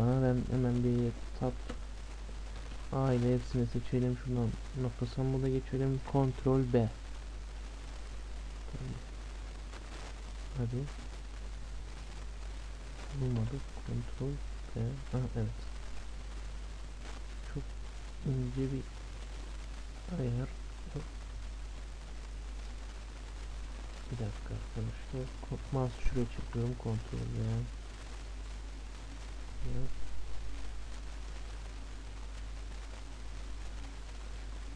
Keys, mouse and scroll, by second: 0.0 click, 1.6 Tab, 2.6 a, 2.7 a, 4.5-6.3 drag, 6.3 ctrl+b, 12.3-14.1 drag, 13.7 ctrl+b, 24.3 ctrl+z, 26.3 ctrl+b.